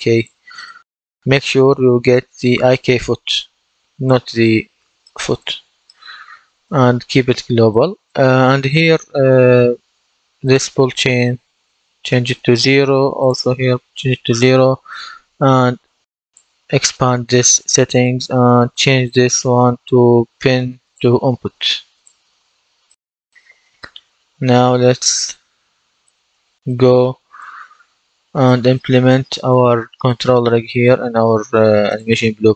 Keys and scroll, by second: 11.3 KP_0, 11.5 Return, 13.4 KP_0, 13.5 Return.